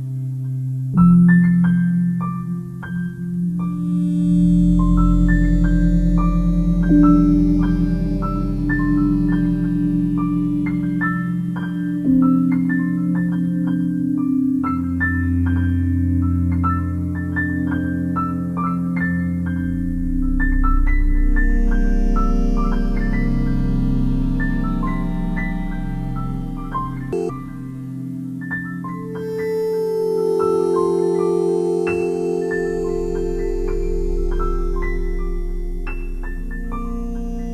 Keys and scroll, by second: 20.7 ctrl+i.